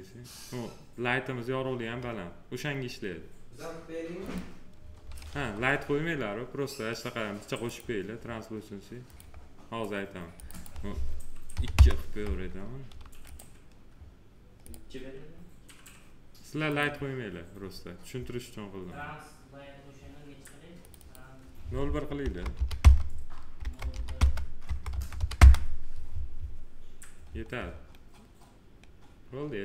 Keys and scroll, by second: 5.2 F3, 11.4 2, 11.7 Return, 22.1 0, 22.7 Return, 23.5 0, 24.1 Return, 24.6 0, 25.3 Return.